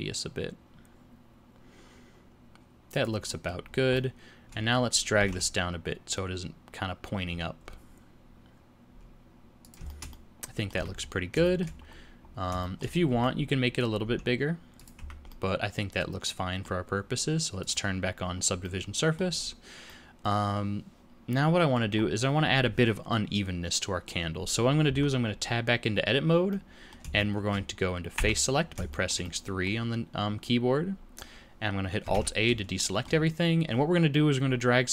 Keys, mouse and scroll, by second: 3.3 middle click, 3.6 scroll down 2, 4.0 middle click, 5.2 g, 9.9 shift+middle click, 10.8 Tab, 11.0-11.4 scroll down 5, 11.5 shift+middle click, 11.9-12.5 scroll up 3, 12.6 shift+middle click, 12.9 scroll up 1, 13.1 Tab, 14.0 s, 15.0 Tab, 15.3 middle click, 17.6 click, 18.6 middle click, 19.4-19.9 scroll down 3, 19.9 middle click, 22.0 scroll up 2, 24.9 Tab, 26.5 middle click, 27.2 shift+middle click, 28.2 3, 28.9 shift+middle click, 29.2 middle click, 32.1 alt+a, 32.8 shift+middle click.